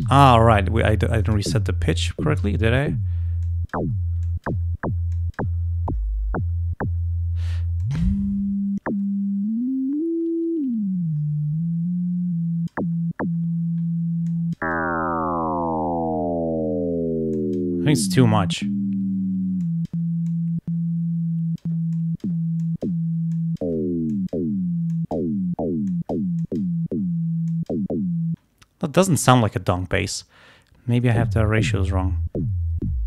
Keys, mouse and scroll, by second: 3.5 click, 4.3 click, 5.2 click, 7.9-9.4 drag, 10.1-13.0 drag, 14.3 click, 17.4 click, 18.1 click, 19.7 click, 20.3-21.9 drag, 22.0 click, 22.7 click, 23.4 click, 24.2 click, 24.9 click, 25.9 click, 26.5 click, 27.5 click, 30.1-31.4 drag.